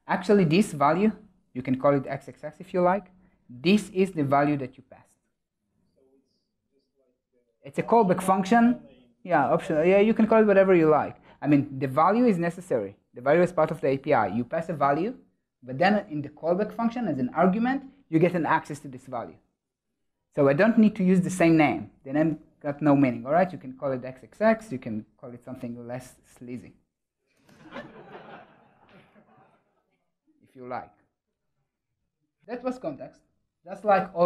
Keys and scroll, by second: 28.2 ctrl+alt+shift+Left, 29.0 super+z.